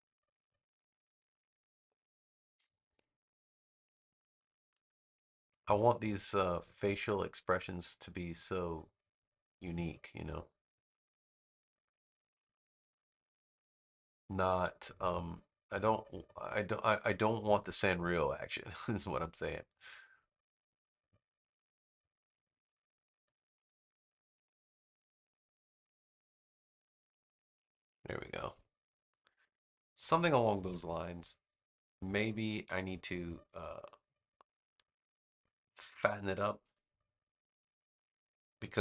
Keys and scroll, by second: 30.5 v.